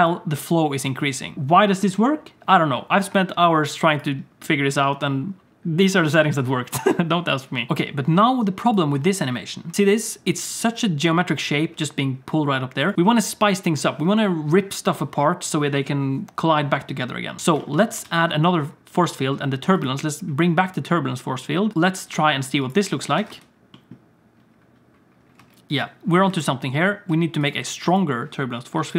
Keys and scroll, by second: 7.7 space, 9.0 space, 9.7 space, 11.7 space, 17.5 ctrl+s, 18.0 shift+a, 23.0 Tab, 23.2 Tab, 23.3 space, 25.4 space, 26.3 space, 27.1 space.